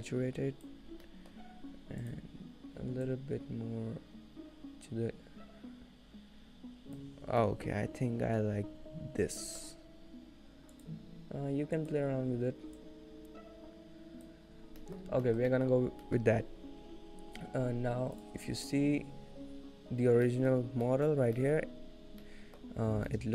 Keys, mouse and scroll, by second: 1.1 middle click, 2.1 click, 7.5 scroll up 1, 7.7 middle click, 8.9-9.3 scroll up 2, 9.5 shift+middle click, 9.5 scroll down 2, 9.8-10.3 scroll up 1, 10.8 click, 11.8 click, 14.7-15.0 scroll down 4, 15.0 middle click, 15.3 shift+middle click, 15.7 middle click, 15.8-16.2 scroll up 2, 16.2 shift+middle click, 17.3-17.7 scroll down 1, 18.2 click, 19.7 click, 20.5 middle click, 20.7-21.7 scroll up 3, 21.2 middle click, 21.7 shift+middle click, 22.1-22.5 scroll up 1, 23.0 middle click, 23.0 scroll down 4.